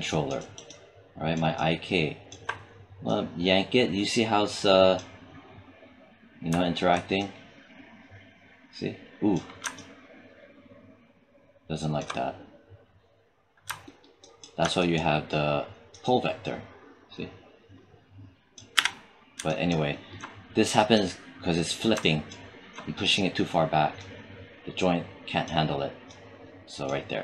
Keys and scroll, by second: 18.6 z.